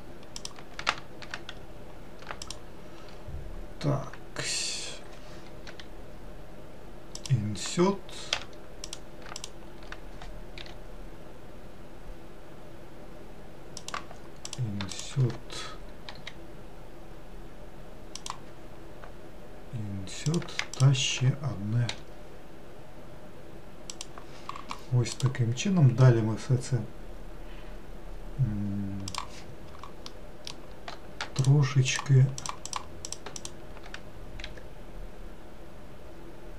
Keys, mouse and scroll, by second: 0.4 click, 2.5 shift+click, 8.4 w, 8.9 click, 9.5 shift+click, 14.5 click, 15.0 shift+click, 20.3 click, 20.8 shift+click, 30.2-31.5 middle drag, 31.5 shift+click, 32.5 shift+click, 32.7 shift+click, 33.1 shift+click, 33.4 shift+click, 34.5 e.